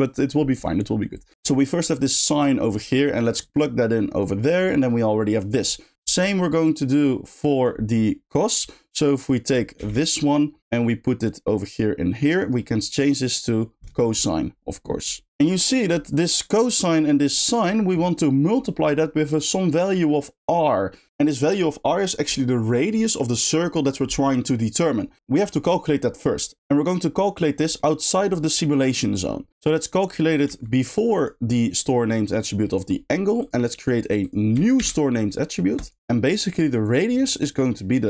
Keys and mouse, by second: 1.1 click, 2.7 middle click, 2.9 click, 3.4 click, 3.6-4.2 drag, 5.6 click, 7.0 click, 9.1 click, 10.6 shift+click, 11.2 shift+click, 11.5 shift+click, 12.3-14.1 shift+drag, 15.7 middle click, 27.8 middle click, 29.2 middle click, 29.7-30.3 drag, 30.4 g, 32.7 click, 33.4 click, 34.2 click, 35.7 shift+click, 37.9 click.